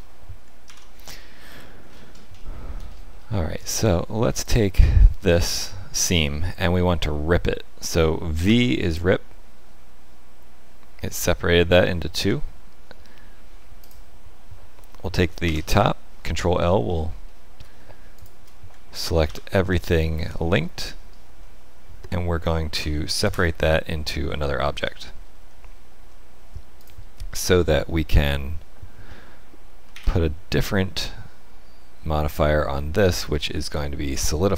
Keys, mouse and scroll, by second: 0.6 ctrl+l, 1.8-2.2 scroll up 5, 2.3 shift+middle click, 2.8-3.2 scroll up 4, 3.3 shift+middle click, 4.4 alt+click, 8.4 v, 13.8 click, 15.4 ctrl+l, 16.6-17.2 scroll down 6, 17.2 shift+middle click, 18.1 shift+click, 19.2 ctrl+l, 21.4 middle click, 22.7 p, 24.4 shift+middle click, 25.3 Tab, 26.7 click, 27.4 shift+middle click, 28.3 middle click, 29.8 z, 30.9 middle click.